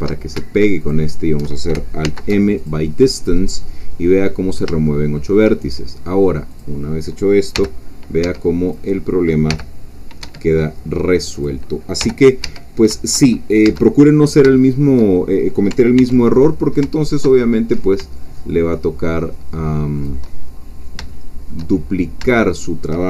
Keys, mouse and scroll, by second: 0.8 alt+shift+click, 2.0 alt+m, 2.6 alt+click, 4.9 shift+click, 5.6 shift+scroll up 2, 6.6 click, 7.5 g, 8.2 Escape, 8.7 click, 9.5 g, 10.2 Escape, 11.4 click, 12.0 g, 12.4 Escape, 12.9 Caps_Lock, 14.0 Caps_Lock, 14.0 middle click, 14.0-14.4 scroll down 1, 14.6 shift+middle click, 15.1-15.5 shift+scroll down 2, 16.0 ctrl+r, 16.3 ctrl+click, 20.0 shift+click, 20.6-20.9 shift+scroll up 2, 21.1 shift+middle click, 21.8-22.2 shift+scroll up 2, 22.3-23.0 shift+middle drag.